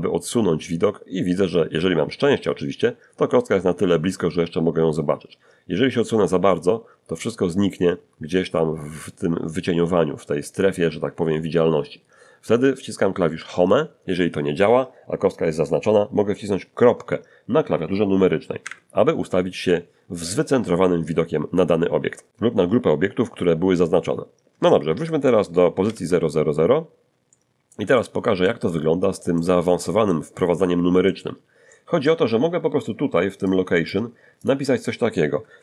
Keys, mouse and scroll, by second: 0.9-1.6 scroll down 3, 5.0-5.5 scroll down 2, 6.0-6.6 scroll down 2, 7.0-7.7 scroll down 2, 11.7 scroll up 2, 11.9 middle click, 13.3 Home, 18.6 ., 21.9 scroll down 2, 24.6 shift+middle click, 25.8 alt+shift+g, 26.4-27.1 alt+shift+scroll up 6, 27.3-29.5 shift+middle drag, 29.7 middle click, 31.3 middle click, 33.0 click, 34.0 click, 35.1-35.6 typing.